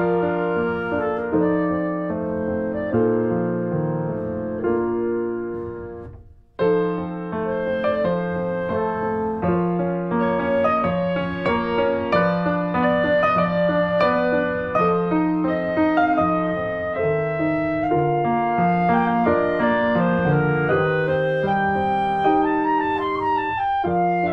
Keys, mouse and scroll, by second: 0.0 alt+middle click, 0.4 o, 2.1 click, 2.6 ctrl+z, 3.2 click, 3.7 ctrl+z, 4.2 click, 6.8 scroll up 1, 7.1-7.4 scroll down 1, 7.4 g, 14.7 alt+middle click, 15.0 click, 15.2 click, 15.4 shift+middle click, 15.7 r, 18.4 click, 20.0 click, 20.3 middle click, 20.6 Tab, 20.7 click, 20.8 Tab, 21.0 Tab, 21.2 click, 21.5 alt+middle click, 21.7 alt+middle click, 22.3 shift+middle click, 22.6 r.